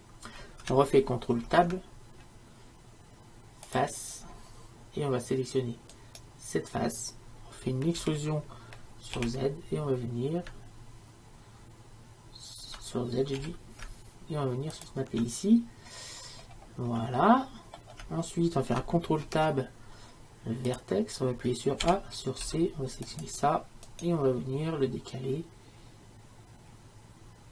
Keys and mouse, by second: 1.5 ctrl+Tab, 6.0-7.7 right drag, 8.0 e, 17.2-19.3 middle drag, 19.3 ctrl+Tab, 21.9 a, 24.1-26.0 drag.